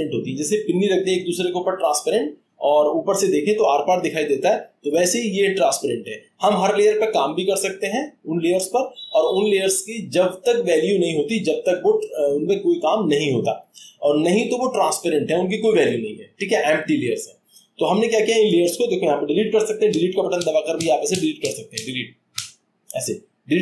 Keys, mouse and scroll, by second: 18.1-19.5 scroll, 19.9 Delete, 20.3 Delete, 20.8 Delete, 21.1 Delete, 21.4 Delete, 21.7 Delete, 22.4 Delete.